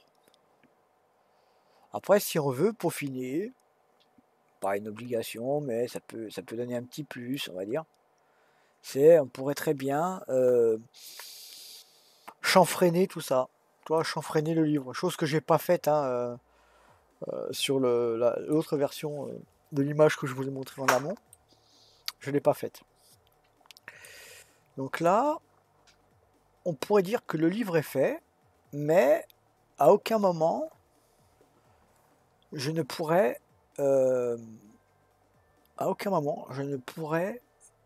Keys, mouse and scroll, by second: 7.5-8.3 scroll up 2, 8.3 scroll down 1, 8.9-11.2 scroll down 1, 11.2 scroll down 1, 14.0-17.1 middle drag, 21.3-24.3 middle drag, 24.5-25.1 scroll down 1, 25.1-28.1 middle drag.